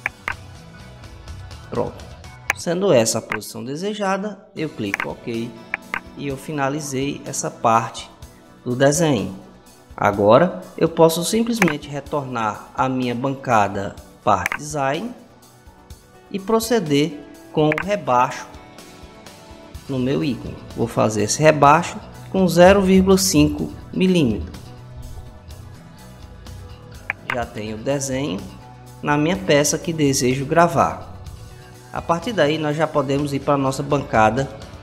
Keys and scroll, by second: 22.2-23.7 typing, 24.6 Return.